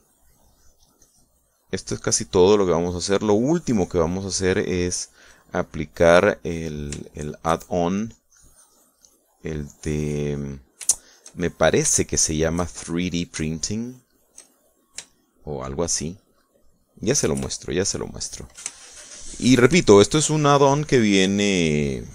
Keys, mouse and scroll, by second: 1.5 click, 2.1 click, 4.7-7.3 drag, 7.5 click, 8.2 shift+click, 9.0-11.6 drag, 12.0 shift+middle click, 12.5 shift+middle click, 14.3 shift+middle click, 14.5-17.1 shift+middle drag, 17.2 shift+middle click, 18.2 KP_Add, 19.8 shift+middle click, 20.9 shift+middle click, 21.8-22.1 drag.